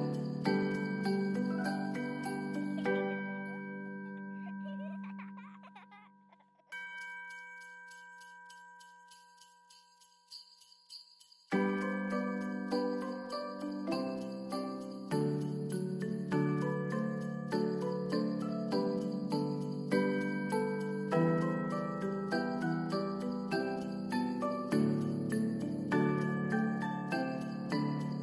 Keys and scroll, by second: 3.8 space, 7.5 space, 14.1 space, 25.8 space, 27.5 space, 28.0 ctrl+s.